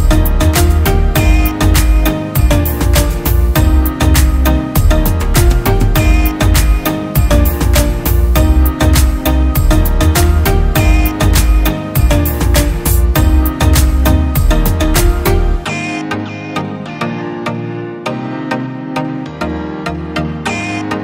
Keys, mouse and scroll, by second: 5.2-5.7 alt+scroll up 1.